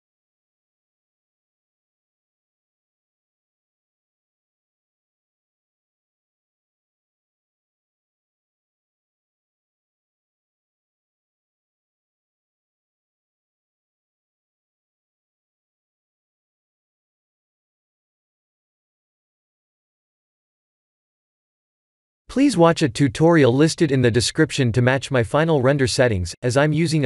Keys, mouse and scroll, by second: 1.5 click, 5.8 click, 6.6 click, 7.5 shift+click, 8.0 shift+click, 8.3 middle click, 9.5 shift+click, 11.3 shift+click, 12.4 click, 13.5 click, 14.0 shift+click, 14.1-14.5 scroll down 8, 14.9 middle click, 15.5 KP_0, 21.1 click, 25.3 click.